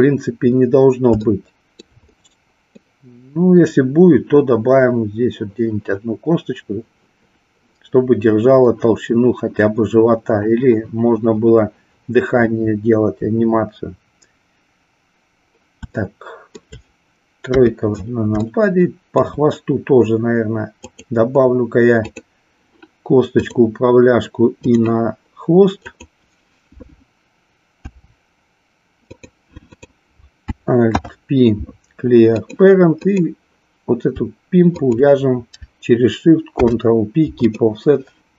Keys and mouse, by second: 1.3-1.9 shift+middle drag, 2.2 middle click, 16.1-16.6 shift+middle drag, 17.4 KP_3, 18.6-19.2 shift+middle drag, 20.8 click, 22.0 click, 23.4-24.7 drag, 26.0 click, 27.8 e, 29.2 click, 29.5 click, 30.8 alt+p, 33.1 click.